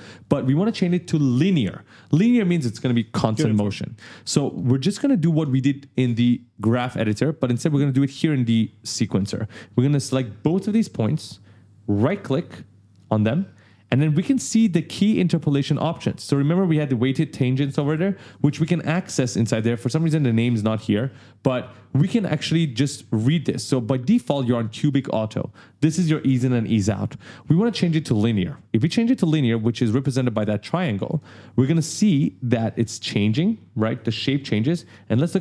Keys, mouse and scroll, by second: 4.2 click, 9.5 click, 11.8 right click, 12.7 right click, 30.9 click, 32.7 ctrl+scroll up 1, 33.7 click, 34.5 ctrl+scroll down 1.